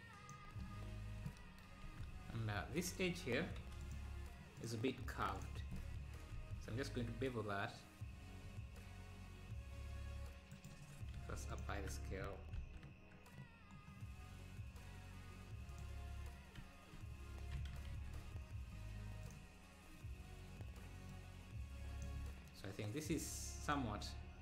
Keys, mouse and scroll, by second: 0.9 Tab, 1.9 ctrl+s, 2.2 Tab, 4.6 click, 5.4 ctrl+click, 6.4 ctrl+b, 10.8 Tab, 11.3 ctrl+b, 12.6 ctrl+b, 23.2 click.